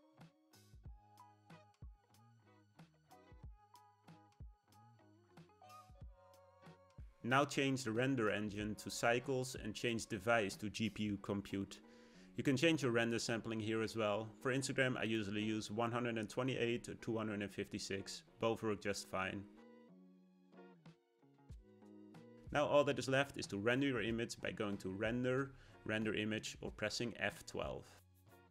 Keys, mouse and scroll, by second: 8.0-15.8 drag, 16.2 click, 17.2-20.2 drag, 22.8 click, 25.4-28.5 drag.